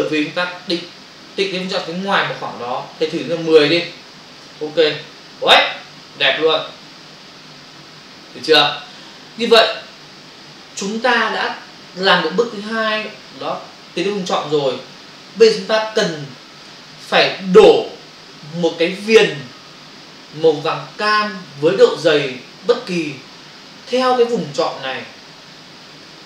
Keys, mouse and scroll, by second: 1.4 click, 4.4 Return.